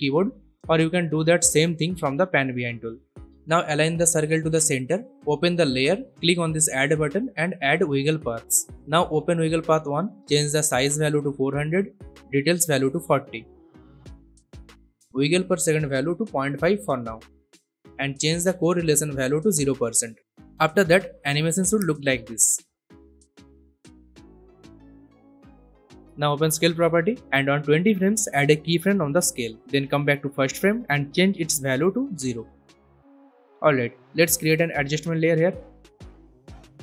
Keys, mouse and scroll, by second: 1.0 click, 10.6-11.8 typing, 12.8 click, 13.6-13.9 typing, 14.3 Return, 15.6 click, 16.3-17.0 typing, 17.1 Return, 17.5-18.8 drag, 18.8-19.5 drag, 23.6 scroll down 1, 24.5 click, 26.4 s, 27.5-28.2 drag, 31.2 0, 31.6 Return, 32.5-33.6 click, 34.4 right click, 35.1 click.